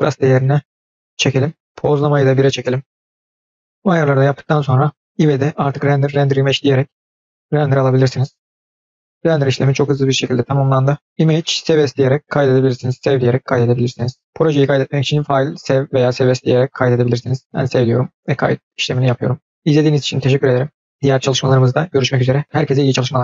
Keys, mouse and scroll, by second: 2.0-3.2 drag, 3.8 scroll down 3, 4.0-5.5 scroll up 4, 5.5-5.9 drag, 14.5 click.